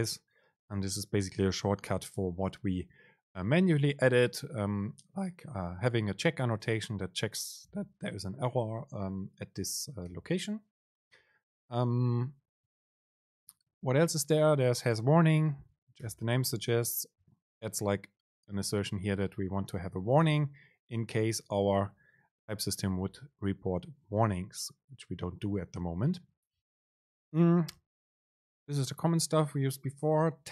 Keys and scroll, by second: 10.2 super+z, 20.5 BackSpace, 21.6 Escape, 23.3 super+z.